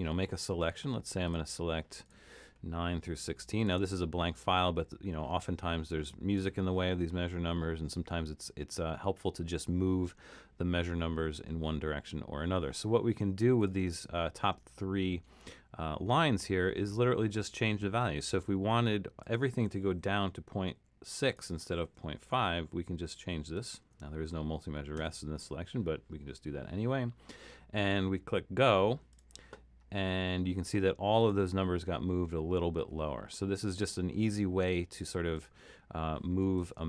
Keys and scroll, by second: 20.8 6, 22.2 BackSpace, 22.5 6, 23.8 BackSpace, 25.0 6.